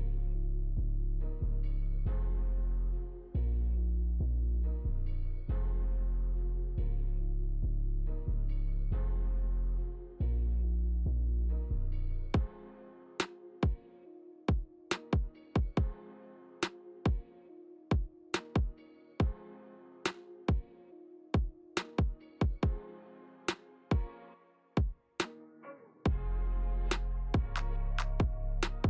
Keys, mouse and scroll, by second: 1.3 Tab, 3.3 Tab, 3.8 middle click, 5.3 shift+click, 7.2 ctrl+j, 8.6 middle click, 9.6 Tab, 10.1 click, 11.4 click, 12.1 middle click, 12.9 e, 14.4 g, 16.1 g, 17.2 middle click, 19.2 r, 20.4 click, 20.7 middle click, 22.1 click, 22.9 shift+middle click, 23.4 scroll up 2, 23.8 shift+middle click, 24.9 shift+click, 25.6 shift+click, 26.7 ctrl+z, 28.0 shift+click.